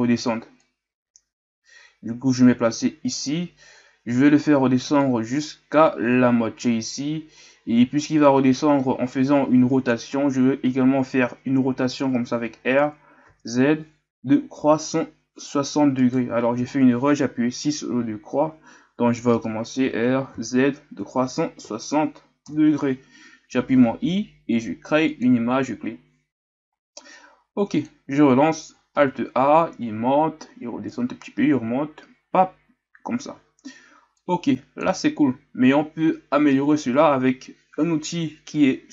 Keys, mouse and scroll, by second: 4.0-5.0 scroll up 1, 5.0-24.8 drag, 27.1-28.9 drag, 28.9 alt+a, 33.3 alt+a, 37.0 alt+a.